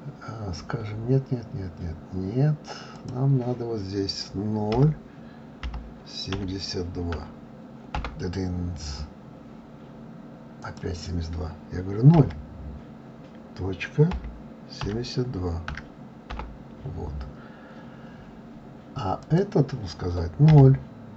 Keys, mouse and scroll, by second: 3.0-5.9 drag, 10.6-13.7 drag, 19.2-21.1 drag.